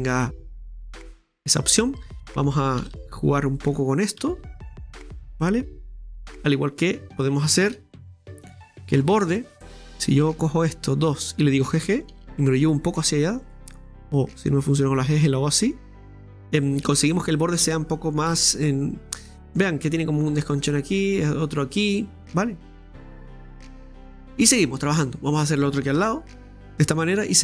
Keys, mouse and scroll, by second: 2.0 right click, 4.0 right click, 6.2-6.6 scroll down 2, 6.6-7.8 middle drag, 7.8 ctrl+r, 9.3-9.6 scroll down 2, 9.6-10.7 middle drag, 10.7 right click, 11.1 shift+right click, 12.1 g, 14.6-16.4 drag, 16.4-16.8 scroll down 1, 16.8-18.3 middle drag, 18.3 Tab, 18.6 scroll down 2, 18.8-24.6 middle drag, 24.6-26.0 scroll up 1, 26.0 Tab, 26.5 middle click, 26.8 Tab, 27.0-27.3 scroll down 3, 27.3-27.4 middle drag.